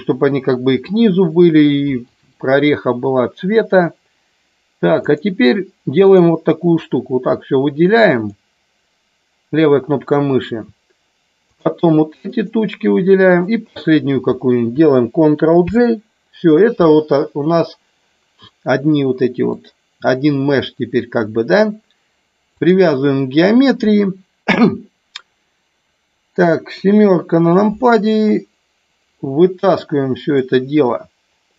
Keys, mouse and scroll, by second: 4.9 click, 6.1 click, 6.8-8.3 drag, 12.3 shift+click, 13.2 shift+click, 15.6 ctrl+j, 19.5-22.7 drag, 26.7 KP_7, 30.3-31.5 drag.